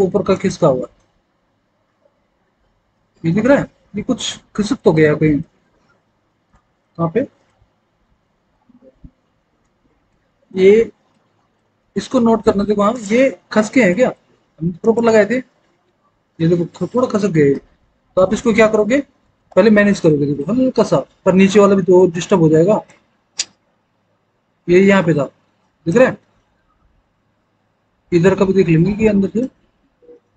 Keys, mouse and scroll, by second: 4.3 alt+w, 4.9 alt+w, 6.0 alt+w, 18.2 alt+w, 19.4 alt+w.